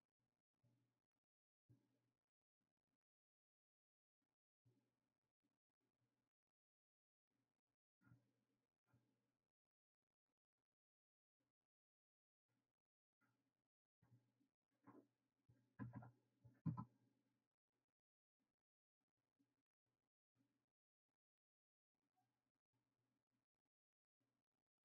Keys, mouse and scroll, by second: 0.5-3.6 drag, 5.0-11.1 drag, 11.1 scroll down 2, 12.5-15.6 drag, 22.5 click.